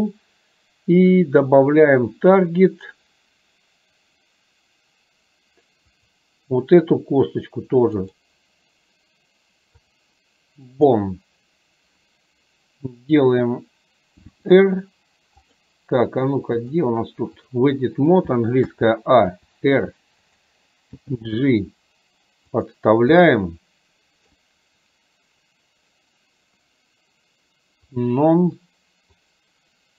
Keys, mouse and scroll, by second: 6.0 click, 9.9-11.0 drag, 16.7-17.7 drag, 23.4-24.4 middle drag, 28.0 click, 29.4-29.9 drag.